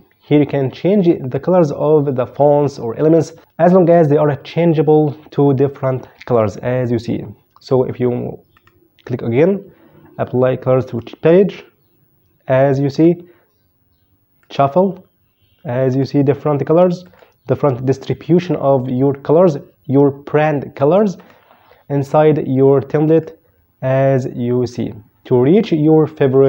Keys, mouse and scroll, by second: 6.5 click, 8.3 right click, 10.6 click, 12.7 right click, 14.2 click, 15.6 right click, 16.8 click, 20.9 right click, 22.8 click, 25.4 click.